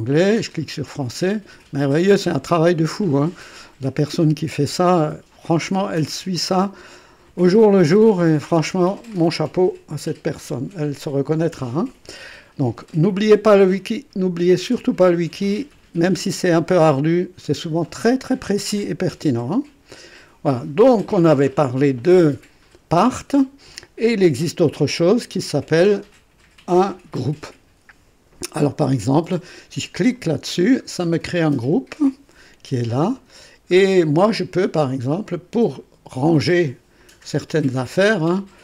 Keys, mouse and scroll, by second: 0.5 click, 2.4 scroll down 1, 4.9 scroll down 1, 6.5-6.8 scroll down 1, 7.8 scroll down 1, 8.7-9.1 scroll up 1, 19.6 click, 30.1 click, 30.7-31.7 scroll down 4, 31.9-32.3 scroll down 2, 33.1-33.5 scroll up 2, 33.8 scroll up 2, 35.2 click.